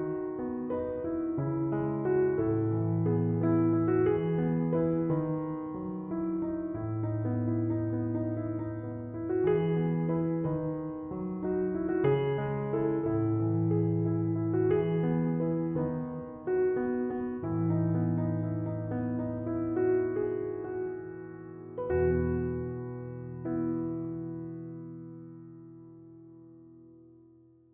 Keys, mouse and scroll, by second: 5.3 Return, 8.2 c, 8.3 o, 27.4 m, 27.5 o.